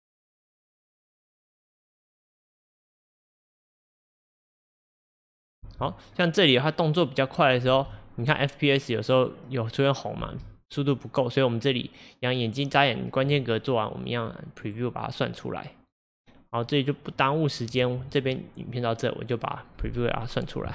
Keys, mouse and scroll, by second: 1.2 scroll down 1, 3.9 scroll up 1, 5.7 space, 7.7 space, 11.2 click, 14.6-17.7 drag.